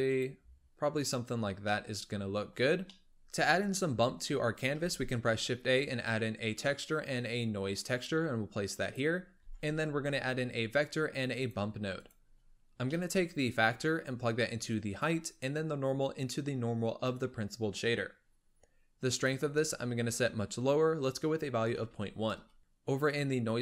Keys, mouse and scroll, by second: 1.5 scroll down 2, 1.6-2.5 middle drag, 2.5-2.9 scroll up 1, 2.9 middle drag, 3.1-3.8 scroll up 1, 4.7 shift+a, 9.3 shift+a, 12.3-12.8 scroll up 3, 12.8-13.7 middle drag, 13.7-18.2 drag, 18.2-19.0 scroll up 2, 19.0-22.3 drag, 22.6-23.6 middle drag.